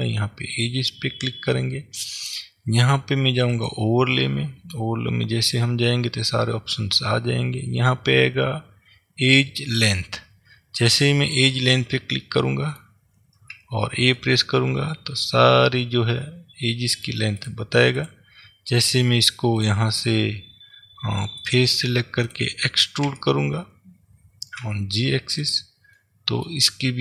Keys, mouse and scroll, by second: 0.6 click, 3.6-12.4 drag, 12.4-17.5 middle drag, 13.6 a, 17.5 click, 18.1 click, 19.6 click, 21.5 click, 22.4 click, 23.1 e, 25.7 click, 26.1-27.0 middle drag.